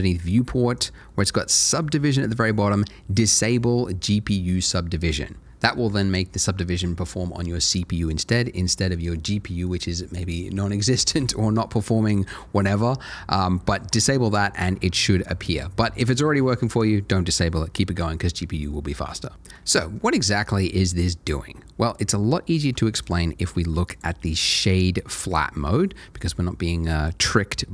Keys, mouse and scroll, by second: 0.0 middle click, 0.7 click, 1.1 middle click, 14.5 click, 21.7-22.3 scroll up 1, 22.3 scroll up 1, 22.4 shift+middle click, 23.0 right click, 23.9 click, 24.3 middle click, 24.7 scroll up 1, 25.3 shift+middle click.